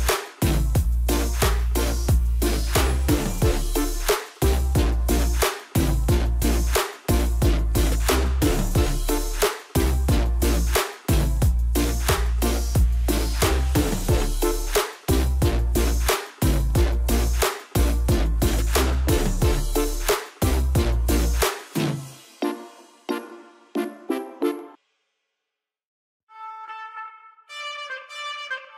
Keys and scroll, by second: 19.9 s.